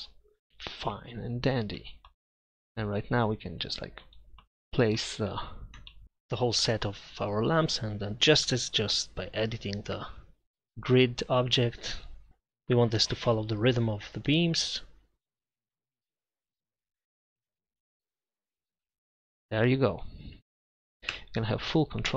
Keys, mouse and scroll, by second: 1.0-1.9 middle drag, 2.9-3.7 right drag, 4.0 click, 4.2 KP_7, 7.1-8.1 middle drag, 9.9 Tab, 11.6 Tab, 13.2 right drag, 13.8 KP_Divide, 16.5 Tab, 16.9 right click, 18.1-20.3 drag, 18.8 Tab, 20.4 Tab, 21.1 Tab.